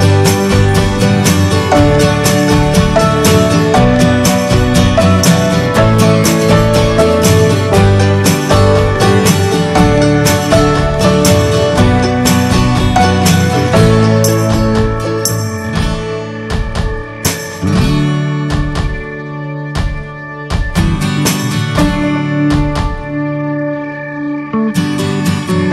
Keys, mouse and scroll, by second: 0.3 Tab, 1.0 p, 1.3 Tab, 1.4 drag, 1.6 click, 2.0 ctrl+s, 2.5 click, 2.7 ctrl+a, 3.3 middle click, 3.6 drag, 5.7-6.8 right drag, 6.8 shift+d, 7.5-8.9 alt+middle drag, 8.9 r, 11.5 click, 12.4 shift+middle drag, 12.6 shift+scroll up 2, 13.6-14.7 drag, 14.9 drag, 15.1 scroll down 4, 15.4 scroll up 4, 15.6 click, 16.7 click, 18.5 click, 18.7 scroll down 4, 19.3-19.8 drag, 20.0 scroll up 1, 20.2-20.9 middle drag, 20.9 scroll up 1, 21.0-21.5 alt+middle drag, 21.5-22.1 scroll up 1, 22.5-22.8 shift+middle drag, 22.8-23.2 scroll up 1, 23.8 click.